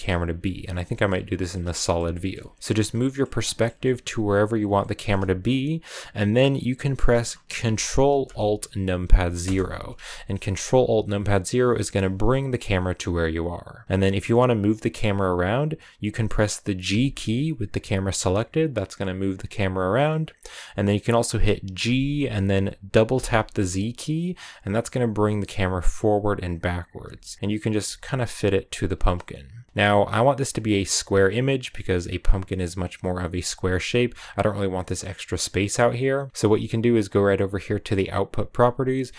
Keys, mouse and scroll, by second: 0.2 z, 0.7 shift+middle click, 0.9-1.3 scroll up 1, 1.3-9.3 shift+middle drag, 9.3 ctrl+alt+KP_0, 11.9 g, 21.7 g, 26.8 g, 27.7 g.